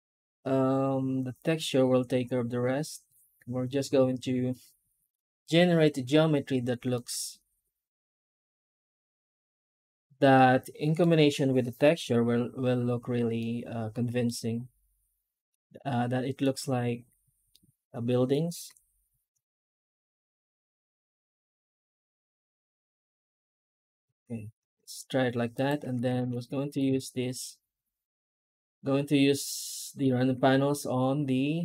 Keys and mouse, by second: 6.8-10.9 middle drag, 11.9 F9, 13.3-14.1 middle drag, 15.4-16.3 middle drag, 17.4-18.2 middle drag, 18.5 F9, 25.4 right click, 25.7 Tab, 26.4 shift+middle click, 26.7 a, 27.3-29.2 middle drag, 29.6 shift+middle click, 30.2 Tab, 30.6 middle click, 31.2-31.6 middle drag.